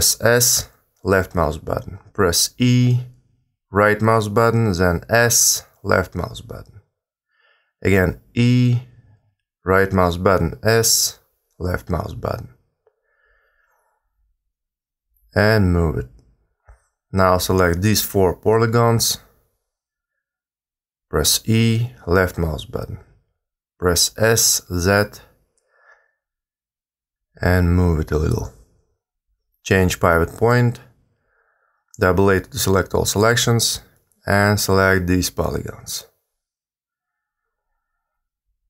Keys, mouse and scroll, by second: 1.9 e, 3.2 s, 7.7 e, 8.9 s, 12.5 g, 15.5 a, 15.6 a, 16.1 click, 19.9 e, 22.7 s, 26.1 g, 28.5 click, 31.7 a, 31.9 a, 33.3 click, 35.8 e, 37.1 g.